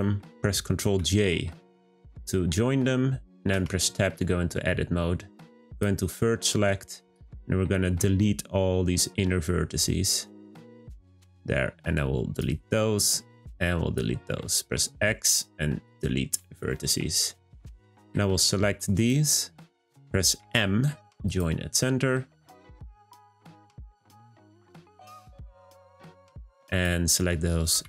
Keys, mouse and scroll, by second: 0.9 ctrl+j, 3.5 Tab, 5.7-7.2 drag, 11.9 shift+click, 13.4 shift+click, 14.6 x, 17.8 click, 18.9 shift+click, 20.4 m, 22.2 click, 23.7 m, 25.6 click, 27.7 m.